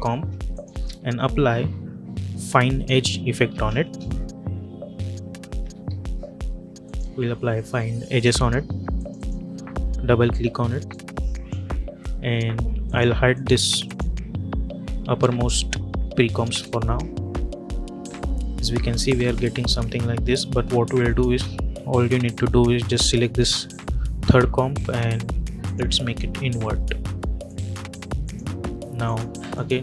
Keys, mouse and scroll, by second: 0.4 click, 0.7 ctrl+a, 3.2-4.0 typing, 5.3-6.2 typing, 6.7-12.7 drag, 11.1-11.4 drag, 16.3 space, 23.5 click.